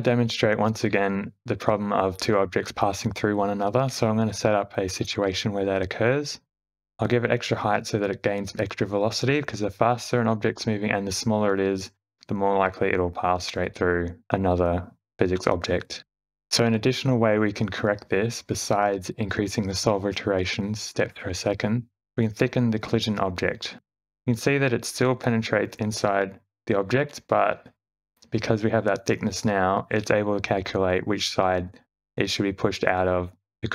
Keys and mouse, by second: 0.6 click, 2.0 x, 3.9 shift+a, 6.5 q, 6.7 space, 6.8 g, 8.6 shift+Left, 9.3 click, 9.5 space, 11.7 shift+middle drag, 12.1 space, 12.6 click, 13.1 s, 14.7 shift+Left, 15.0 space, 15.4 click, 16.7 space, 17.4 click, 19.6 Tab, 20.2 e, 21.8 Tab, 22.1 click, 22.5 space, 24.1-25.3 middle drag, 27.7 `, 30.5 space, 31.1 Left, 31.3 Left, 31.8 Left, 32.1 Right, 33.3-33.7 d.